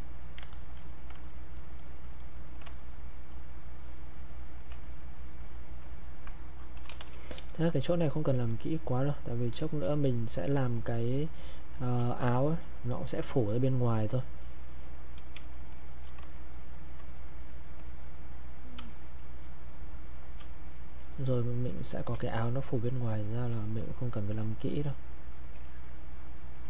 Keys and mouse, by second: 4.9 shift+click, 6.7-7.4 typing, 8.7 click, 9.9 space, 10.3 click, 10.4 space, 10.9 click, 12.0 space, 12.3 click, 12.6 space, 12.8-15.3 drag, 15.3 space, 15.8 click, 15.9 space, 16.3 shift+click, 18.7 space, 19.2 click, 19.3 space, 19.7 click, 20.4 space, 20.7 click, 20.9 space, 21.3 click, 22.2 space, 22.6 click, 22.7 space, 23.5 click, 24.0 shift+click, 24.8 shift+click.